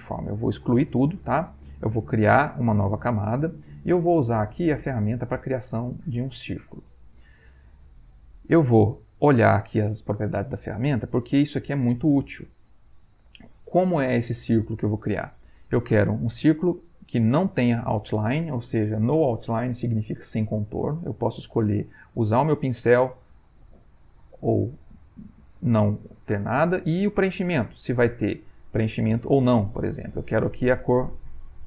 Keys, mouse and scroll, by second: 0.5 click, 2.7 click, 4.9 click, 21.0-22.2 drag, 23.1-25.6 drag, 27.0-31.6 drag.